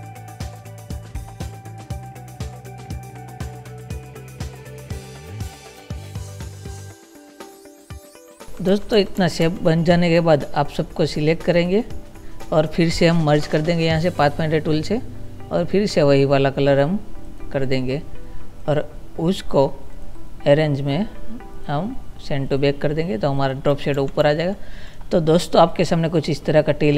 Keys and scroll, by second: 0.2 ctrl+z, 0.4 space, 1.3 ctrl+z, 2.0 ctrl+z, 4.2 ctrl+z, 6.5 ctrl+-, 6.6 space, 7.1 ctrl+z, 8.7 ctrl+-, 24.2 ctrl+-.